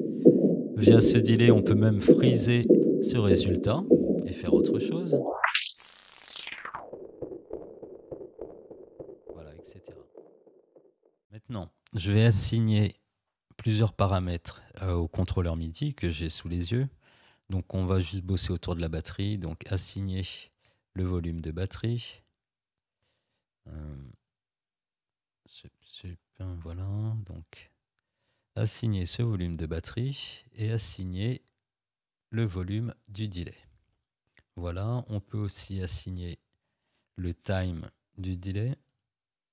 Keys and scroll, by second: 25.3 Delete.